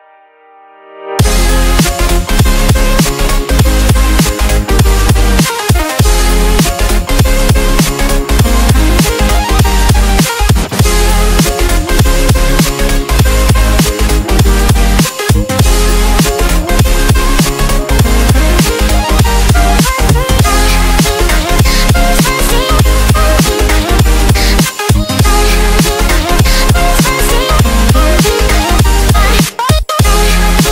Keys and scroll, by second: 4.9 super+z, 5.4 super+z, 5.5 super+z, 5.6 super+z, 5.8 super+z, 7.7 v, 9.3 space, 9.9 space, 10.0 space, 12.3 space, 12.8 space, 19.1 space, 19.6 space, 19.7 space, 19.7 space, 25.4 space, 25.9 super+space, 28.1 super+z, 29.4 super+x, 30.4 space.